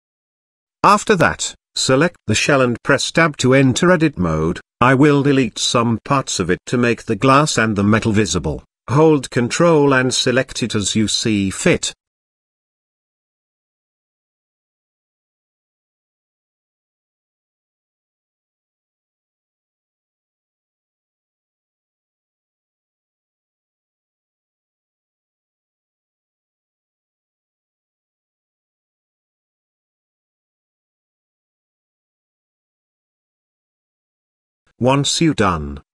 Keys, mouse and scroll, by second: 0.0 click, 1.1 click, 1.6-2.7 scroll down 2, 1.9-3.0 middle drag, 4.3 Tab, 6.0 middle click, 7.5 click, 8.5 ctrl+click, 9.2 ctrl+click, 9.6 ctrl+click, 10.6 ctrl+click, 11.1 middle click, 12.7 ctrl+click, 14.2 ctrl+click, 14.8 ctrl+click, 16.6 ctrl+drag, 17.8 ctrl+click, 18.4-18.9 middle drag, 19.7 ctrl+click, 20.2 ctrl+click, 21.3 ctrl+click, 21.9-22.8 middle drag, 23.8-25.6 drag, 26.2 ctrl+z, 26.9-27.8 shift+drag, 28.3 shift+click, 28.6 shift+click, 28.9 middle drag, 29.2 shift+click, 29.4 shift+click, 29.7 shift+click, 29.9 shift+click, 30.1 shift+click, 30.3 shift+click, 30.6 shift+click, 31.0 middle click, 31.4 shift+click, 31.6 shift+click, 32.2 shift+click, 32.5 shift+click, 32.9 shift+click, 33.2 shift+click, 33.6 shift+click, 33.8-34.7 scroll down 2, 34.0-35.6 middle drag, 35.7-35.9 scroll up 2.